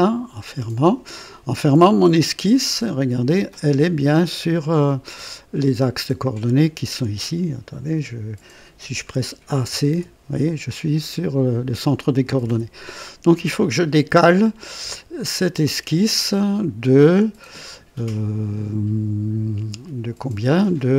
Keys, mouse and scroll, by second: 0.3 click, 9.2-10.2 typing, 12.0-13.0 typing, 15.1 click, 17.1 click.